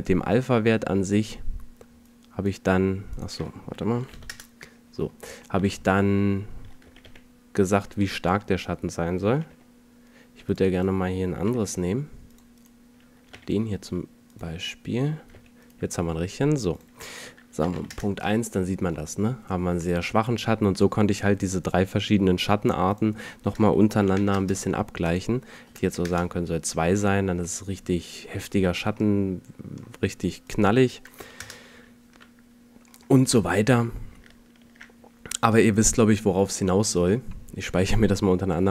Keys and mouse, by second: 0.3-3.7 drag, 5.1-5.7 middle drag, 6.9 g, 9.3 g, 11.5 g, 13.4 g, 15.4 g, 21.9-24.3 middle drag, 27.7-28.4 middle drag, 28.6-29.2 middle drag, 30.5-32.3 right drag, 32.3 middle click, 37.1 ctrl+shift+s.